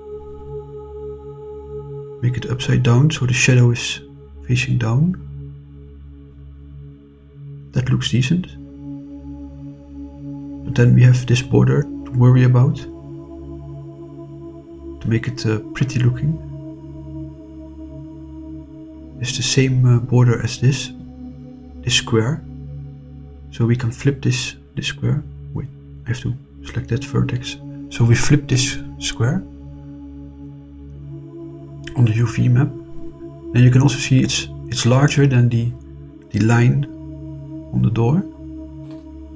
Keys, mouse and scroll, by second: 0.2 r, 0.4 1, 0.8 8, 1.1 0, 1.9 Return, 5.5-8.8 middle drag, 14.5 click, 17.0 shift+click, 18.4 shift+click, 19.7 right click, 22.9 click, 24.5 ctrl+z, 26.4 shift+click, 26.9 right click, 28.1 click, 31.5 shift+click, 38.8 click.